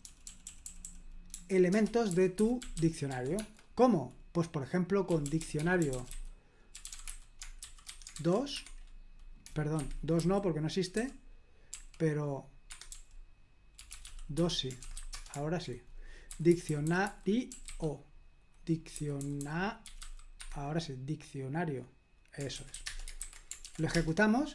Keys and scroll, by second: 0.0-3.6 typing, 1.7 Return, 5.1-8.1 typing, 8.5 Escape, 9.8 Escape, 10.2-11.7 typing, 12.7 Escape, 12.9-20.5 typing, 22.5-23.2 typing, 23.6 ctrl+p, 23.9 Return.